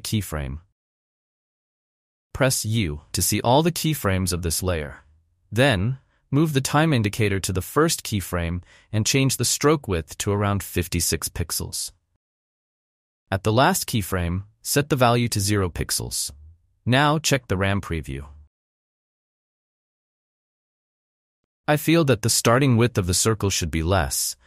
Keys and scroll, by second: 4.6 u, 10.7-11.6 typing, 16.0 0, 16.1 Return, 18.5 n, 19.0 b, 19.3 space.